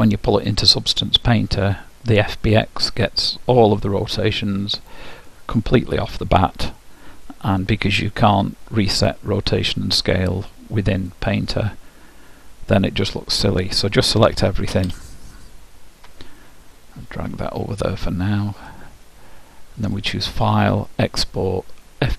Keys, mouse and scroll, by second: 14.4 a, 14.9 a, 20.0-21.9 drag.